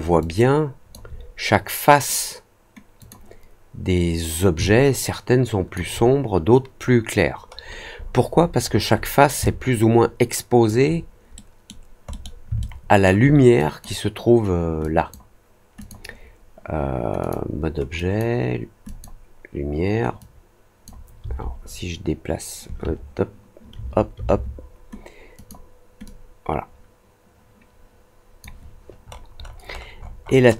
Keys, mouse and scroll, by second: 0.1 alt+click, 2.9 click, 4.6-5.7 alt+drag, 7.5-9.1 scroll down 7, 9.4-10.6 alt+drag, 11.3 middle click, 12.0 middle click, 12.5-13.0 alt+middle drag, 13.5 click, 14.7 click, 15.7 click, 17.1 click, 17.9 drag, 18.8 click, 20.1 click, 25.3 click, 26.0-28.3 drag, 28.9 middle click, 29.3 middle click, 29.6 middle click, 29.9 middle click, 30.1 middle click, 30.4 middle click.